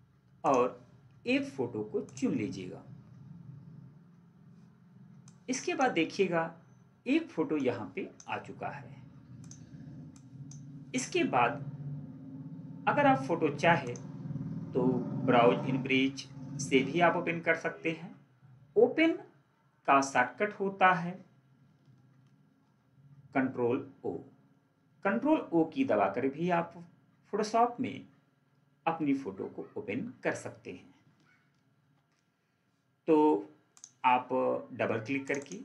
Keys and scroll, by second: 31.7 ctrl+4.